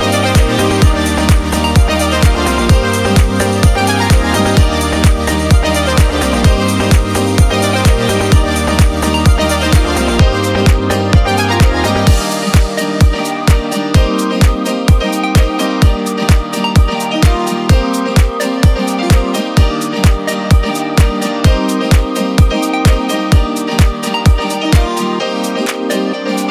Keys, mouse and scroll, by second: 1.5-2.1 scroll down 2, 2.1-2.7 middle drag, 2.8-3.7 shift+middle drag, 4.6 click, 4.7-8.7 drag, 9.7 click, 10.1 click, 10.8 click, 11.2 click, 12.2 shift+a, 15.1-17.0 drag, 18.7 click, 18.9-22.5 drag, 22.8-23.6 scroll down 2, 23.9 shift+a.